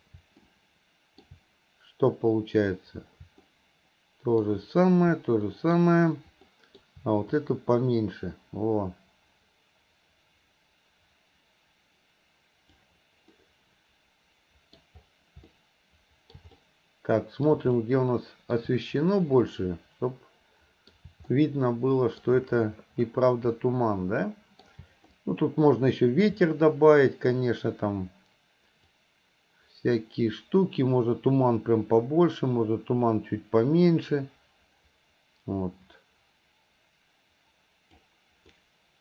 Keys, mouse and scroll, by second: 23.1 scroll up 2.